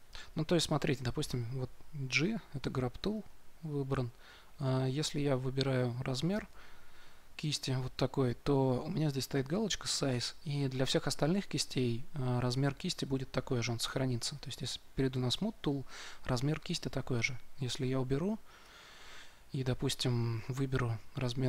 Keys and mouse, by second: 1.2 g, 4.9 f, 15.0 s, 18.6-20.6 drag, 20.6 f.